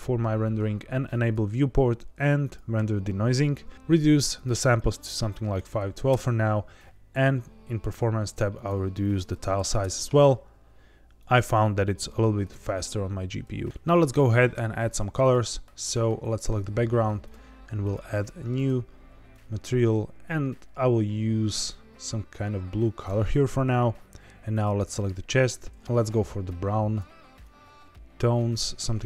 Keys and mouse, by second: 1.1 click, 2.4 click, 3.7 ctrl+z, 4.3-6.1 drag, 7.1 click, 8.5-10.1 drag, 11.2 click, 15.1 click, 17.9 click, 18.5 drag, 25.3 drag.